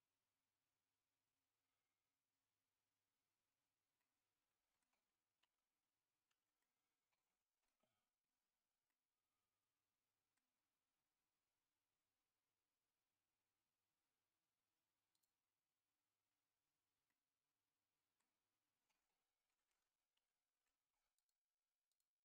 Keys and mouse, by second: 4.0 middle click, 5.7 ctrl+z, 6.6-7.7 middle drag, 8.9-10.3 middle drag, 15.1 click, 17.1-18.2 middle drag, 20.1 ctrl+z, 21.2 click, 21.9 click.